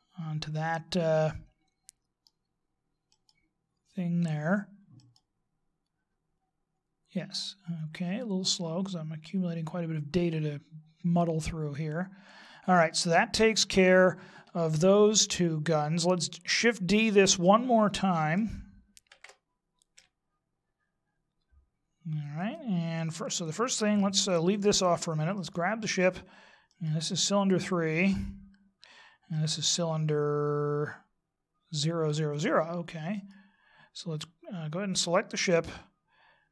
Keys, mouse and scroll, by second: 4.3 right click, 6.5 right click, 8.5 click, 19.1 shift+d, 25.7 right click, 28.2 right click, 30.5 right click, 34.3 right click.